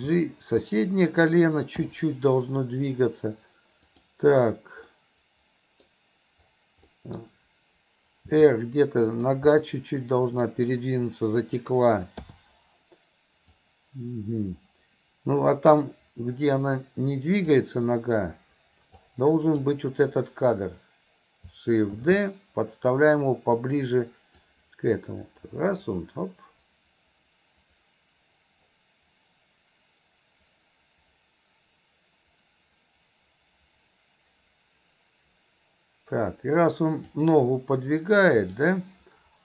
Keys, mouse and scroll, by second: 3.9 click, 5.0-5.9 middle drag, 6.9-7.2 middle drag, 13.6-17.6 drag, 19.0-19.6 drag, 24.5-37.2 drag, 38.4 click.